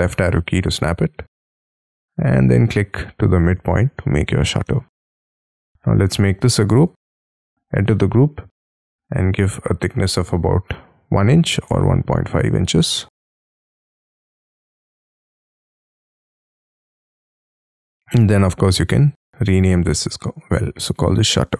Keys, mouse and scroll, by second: 0.1-0.5 scroll up 6, 0.5 middle click, 0.7-4.0 scroll down 6, 4.0 middle click, 4.7 space, 5.1 double click, 6.0 g, 6.9 double click, 7.7 scroll up 3, 9.9 1, 11.7-16.7 typing, 16.0 Return, 20.4-21.5 typing.